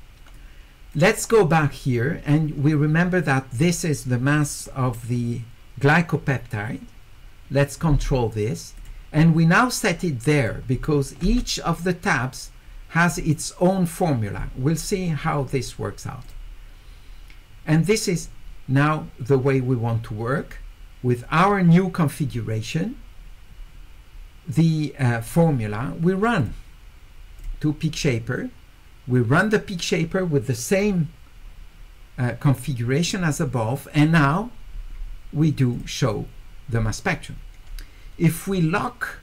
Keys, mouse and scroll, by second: 0.3 click, 8.8 click, 10.4 click, 13.1 click, 16.2 click, 27.4 click, 30.7 click, 34.2 click.